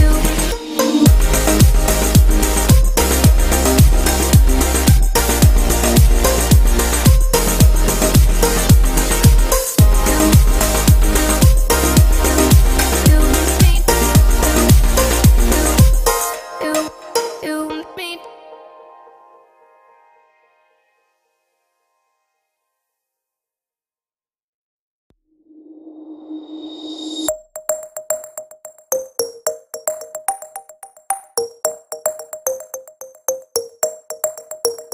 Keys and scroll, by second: 4.0 ctrl+t.